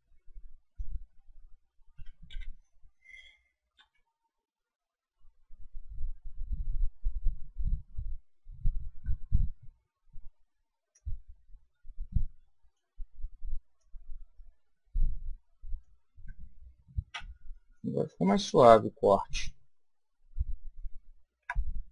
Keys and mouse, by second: 3.8 a, 8.9 b, 13.7 click, 17.1 a, 17.5-19.5 middle drag, 21.4 Tab.